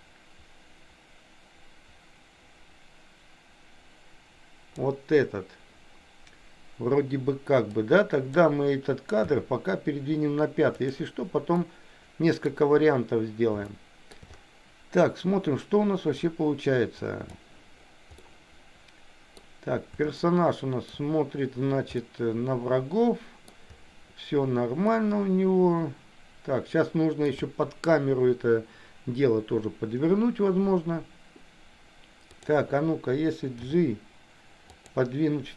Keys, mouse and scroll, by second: 7.7 click, 10.1 g, 11.7-13.1 middle drag, 13.7 shift+middle click, 16.3-17.3 drag, 18.2-19.5 middle drag, 20.2 shift+middle click, 21.9-23.5 middle drag, 25.0-27.3 middle drag, 32.4 click, 33.6 g.